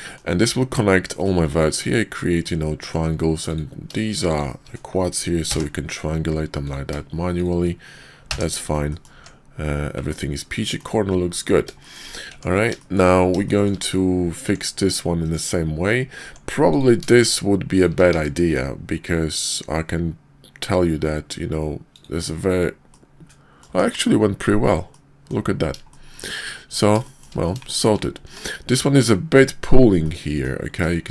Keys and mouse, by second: 1.2 click, 2.4 click, 4.3 shift+click, 5.4 j, 8.3 j, 8.9 drag, 9.1 Tab, 10.1-10.8 drag, 11.8 shift+drag, 12.3 Tab, 12.8 shift+click, 13.4 shift+click, 14.3 Tab, 14.7 click, 15.3 click, 16.2 Tab, 16.6 click, 17.0 shift+click, 18.1 q, 22.8-23.6 drag, 23.7 Tab, 24.9-25.3 drag, 25.9 shift+click, 27.0 shift+click, 27.6 shift+drag, 28.2 Tab, 30.0-30.4 drag.